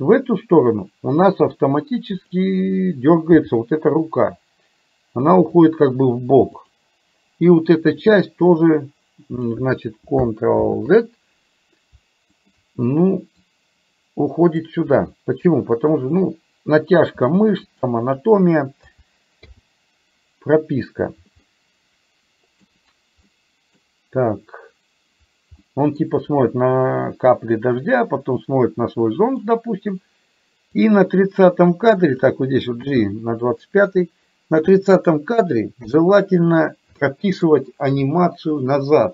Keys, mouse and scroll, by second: 3.5 g, 6.6 click, 8.0-9.6 drag, 10.6 ctrl+z, 12.5 shift+click, 13.6-14.8 drag, 15.9 click, 17.1 r, 18.9 a, 19.5 i, 21.6-22.6 middle drag, 23.4 middle click, 25.6 middle click, 28.1-29.5 middle drag, 30.8 click, 31.9 click, 32.9 g, 35.9 KP_3, 37.1 shift+middle click.